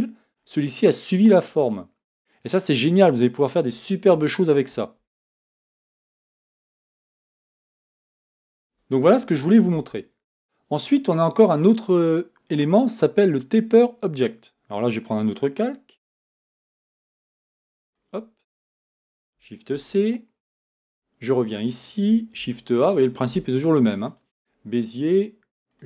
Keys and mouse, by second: 9.7 Tab, 16.0 Tab, 16.4 a, 19.7 shift+c, 20.9 KP_1, 22.4 shift+a.